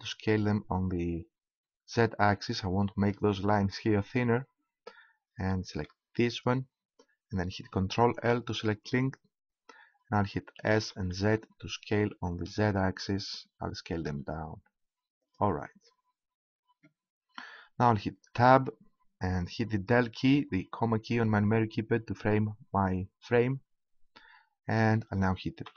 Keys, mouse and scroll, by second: 3.0-4.1 right drag, 4.1 click, 5.4 middle click, 6.3-8.1 right drag, 8.1 ctrl+l, 10.5 s, 15.3-17.1 drag, 18.3 Tab, 21.4 KP_Decimal, 25.6 p.